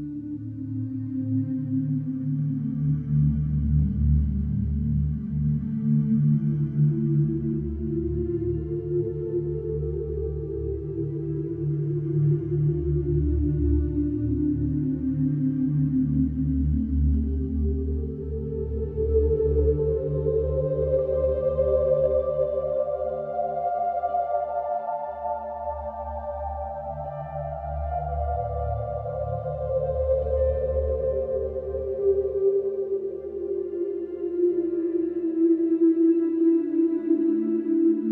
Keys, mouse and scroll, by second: 0.2 click, 1.6 click, 3.2 scroll, 3.8-4.1 scroll, 5.2 click, 7.2 click, 9.1 click, 10.6-11.5 scroll, 12.0 click, 12.5-12.9 scroll, 14.8-15.9 scroll, 16.1 click, 17.5 click, 19.0 middle click, 19.7 middle click, 19.8 middle click, 21.3 click, 22.5 click, 24.0 middle click, 24.1 middle click, 24.1 middle click, 24.2 middle click, 25.0 middle click, 25.4 middle click, 25.4 middle click, 25.8 Escape, 28.3 click, 29.8 ctrl+8, 31.3 Escape, 34.2 click, 35.6 click, 37.2 click.